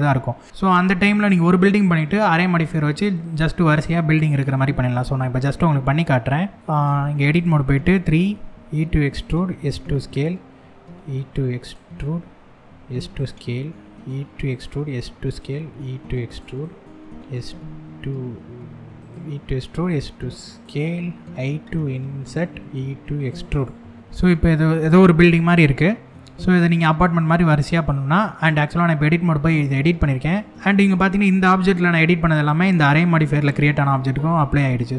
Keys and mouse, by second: 2.3-2.7 shift+middle drag, 4.4 Tab, 5.2 middle click, 6.6 3, 8.0 e, 8.8 click, 9.0 s, 9.8 click, 11.3 click, 12.2 s, 12.8 click, 13.4 e, 14.1 click, 14.3 s, 14.9 click, 15.1 e, 15.9 click, 16.2 middle click, 18.6 click, 19.3 s, 20.2 click, 21.0 i, 21.9 click, 22.2 e, 22.8 click, 23.8 middle click, 25.4 middle click, 34.2 Tab.